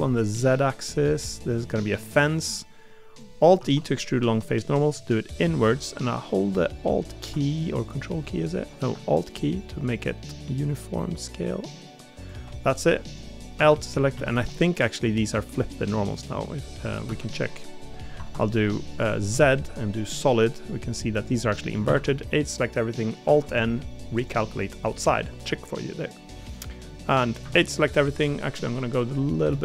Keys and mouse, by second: 3.5 alt+e, 17.0 ., 20.5 middle click, 21.8 a, 23.2 alt+n, 24.9 middle click, 25.8 middle click, 27.8 middle click.